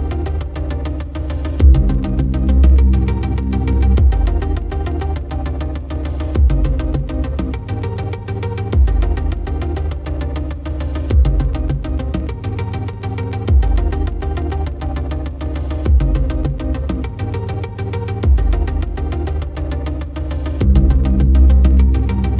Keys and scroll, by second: 12.5 ctrl+=.